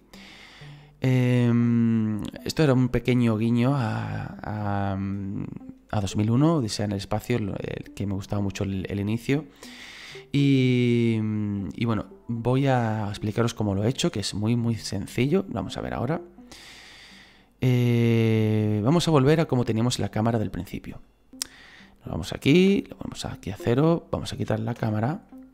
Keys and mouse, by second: 21.0 click, 22.6 KP_0, 24.0 right click, 24.8 Delete, 25.3 middle click.